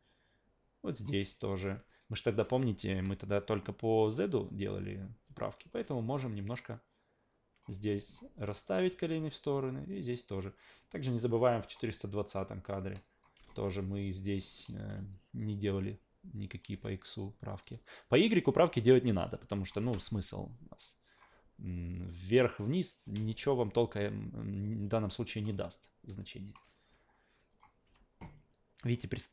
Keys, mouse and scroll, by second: 1.4 alt+click, 1.9 alt+right drag, 2.1 alt+click, 2.9 a, 5.4-5.7 alt+middle drag, 6.4-7.6 drag, 8.0 alt+click, 8.6 click, 9.3-10.1 drag, 11.4 click, 12.9 click, 13.5 alt+middle drag, 13.8 alt+right click, 14.1 alt+middle click, 14.4 alt+right click, 15.5-16.6 drag, 16.7 q, 17.4 click, 17.6 w, 18.4-19.7 drag, 19.8 ctrl+z, 20.5-21.2 drag, 21.9-23.0 drag, 23.2 ctrl+z, 24.1 click, 24.9 alt+middle drag, 27.5 click, 27.8 a, 28.9 click.